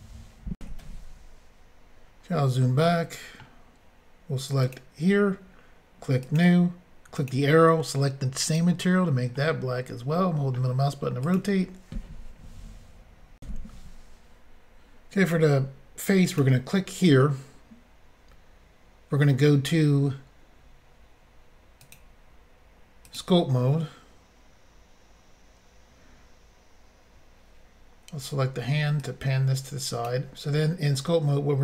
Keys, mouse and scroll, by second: 0.6 Insert, 2.3-2.8 scroll down 1, 2.8 middle click, 4.6 click, 4.7 click, 6.3 click, 7.1 click, 7.3 click, 8.4 click, 8.5 click, 9.3 middle click, 11.2 click, 13.4 Insert, 16.3 click, 16.4 click, 21.8 click, 21.9 click, 23.1 click, 23.1 click, 29.0 click.